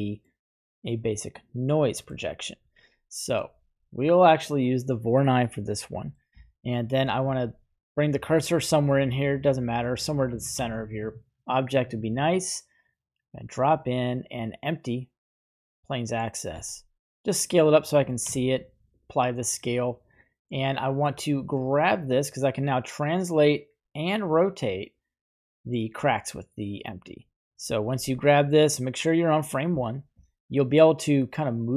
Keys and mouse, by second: 1.3-2.0 middle drag, 5.9 middle click, 10.5 shift+a, 16.4 s, 18.2 ctrl+a, 20.0-21.2 right drag, 23.5 click, 28.0 g.